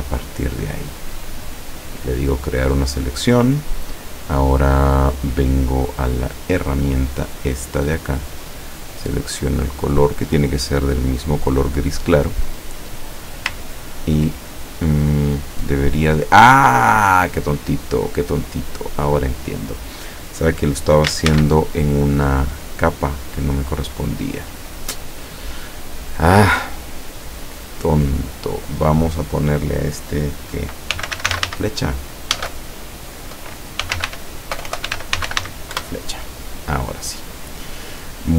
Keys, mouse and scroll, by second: 1.8 click, 6.4 click, 8.8 click, 10.2 click, 12.2 click, 13.7 ctrl+click, 15.7-16.0 scroll down 2, 16.5-16.8 scroll up 2, 17.2 scroll up 2, 21.3 ctrl+shift+a, 24.5 click, 27.7 click, 30.8-32.6 typing, 32.4 Caps_Lock, 33.6-36.0 typing.